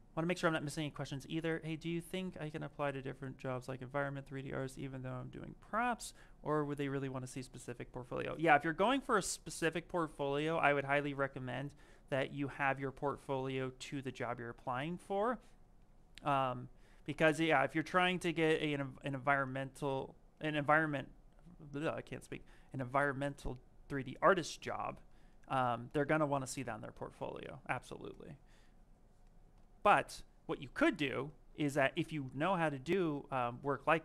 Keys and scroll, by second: 16.6 s, 18.1 m.